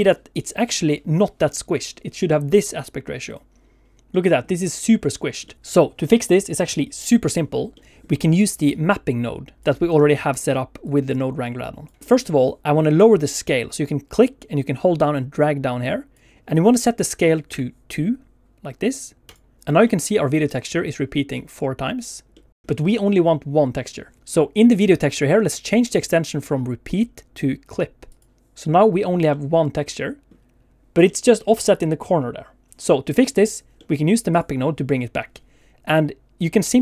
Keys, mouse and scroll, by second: 4.1 middle click, 5.1 scroll down 1, 5.4 middle click, 5.5 Escape, 7.7 middle click, 8.4 click, 8.7 click, 10.8 click, 11.4 click, 12.0 middle click, 12.0 click, 12.0-12.4 scroll up 2, 14.1 click, 22.7 shift+middle click, 24.2 middle click, 24.2 click, 24.6 click, 25.8 click, 29.3 middle click, 31.1 middle click, 33.8 middle click, 34.3 click.